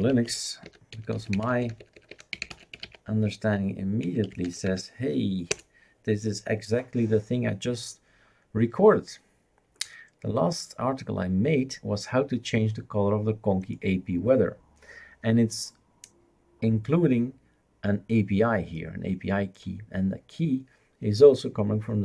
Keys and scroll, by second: 0.0-5.3 typing, 5.5 Return.